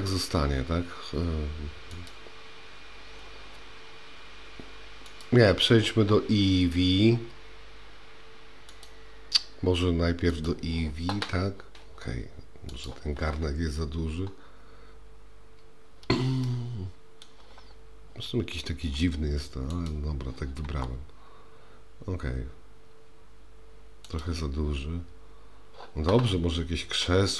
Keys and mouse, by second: 5.2 click, 8.8-10.5 drag, 12.7 click, 16.5-17.2 shift+middle drag, 20.7 s.